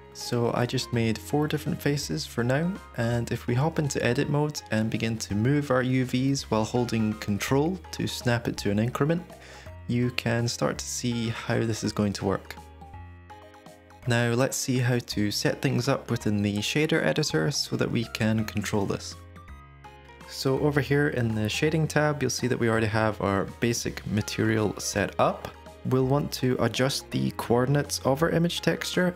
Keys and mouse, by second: 3.5 Tab, 6.1 g, 14.1 Tab, 20.8 click.